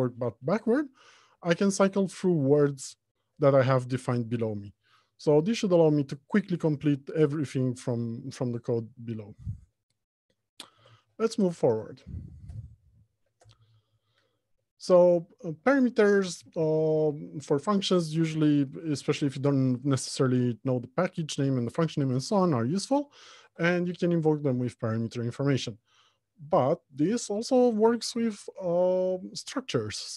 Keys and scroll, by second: 11.0 alt+Home, 11.5 Left, 12.0 Return, 23.9 ctrl+p.